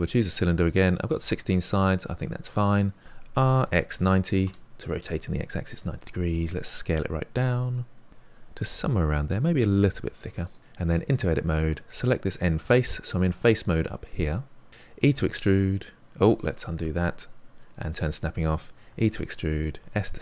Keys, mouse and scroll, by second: 3.0 r, 6.1 s, 8.1-8.8 scroll up 3, 8.8-9.7 middle drag, 9.7 s, 11.0 Tab, 11.8 click, 14.7 middle click, 15.1 e, 16.8 ctrl+z, 17.9 click, 18.8 e, 19.8 s.